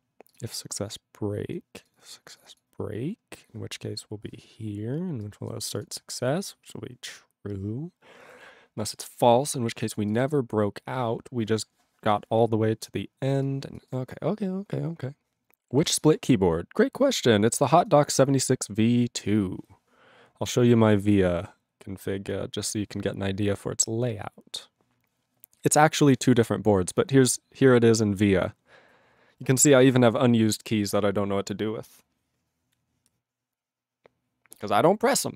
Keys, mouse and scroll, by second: 0.3 click, 0.3 click, 0.4 click, 0.5 click, 0.9 click, 1.5 click, 1.8 click, 1.9 click, 2.0 click, 2.1 click, 2.4 click, 2.4 click, 2.5 click, 2.5 click, 3.1 click, 3.2-4.8 scroll up 1, 4.8-5.2 scroll, 5.2 click, 5.5 click, 5.7 click, 5.7 click, 5.8 click, 6.2-6.8 scroll down 4, 8.8 click, 8.8 click, 9.4 click, 9.7 click, 9.8 click, 9.9 click, 9.9 click, 10.1 click, 10.1 click, 10.2 click, 10.3 click, 10.8 click, 11.6 scroll up 1, 11.7-12.4 scroll, 12.4 scroll, 13.5 click, 13.8 click, 13.9 click, 13.9 click, 14.5 click, 15.7 ctrl+s.